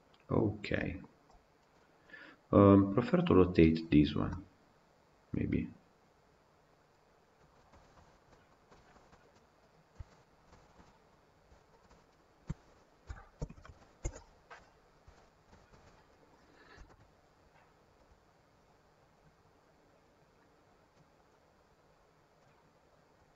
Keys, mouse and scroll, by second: 0.9 scroll up 2, 1.5-3.8 middle drag, 3.8 scroll down 2, 4.1-7.2 middle drag, 7.3 scroll down 4, 7.6 scroll up 1, 7.7 scroll down 3, 8.0 scroll up 1, 8.1-8.4 middle drag, 8.4 scroll down 1, 8.5-9.5 shift+middle drag, 9.5 click, 9.9 Tab, 10.2 scroll up 2, 10.4-11.7 shift+middle drag, 11.7 alt+click, 12.3 a, 13.0 r, 15.0 Tab, 15.2 scroll down 1, 15.4-16.0 shift+middle drag, 16.0 Left, 16.6 KP_Decimal, 21.7-22.2 drag, 22.2-23.3 middle drag.